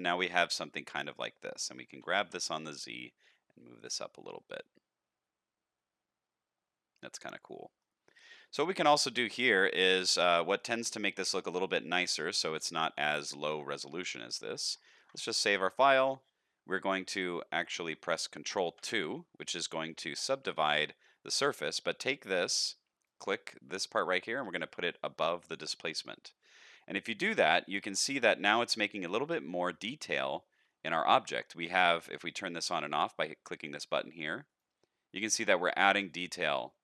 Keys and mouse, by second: 1.9 g, 4.5-7.8 middle drag, 10.6-11.4 middle drag, 11.9-13.2 middle drag, 15.0 ctrl+s, 15.8 click, 18.7 ctrl+2, 23.0-25.5 drag, 26.7-27.3 middle drag, 27.6 shift+middle drag, 28.1-28.6 middle drag, 29.2 shift+middle drag, 29.7-30.1 middle drag, 30.3-30.7 shift+middle drag, 33.5 click, 35.3 click.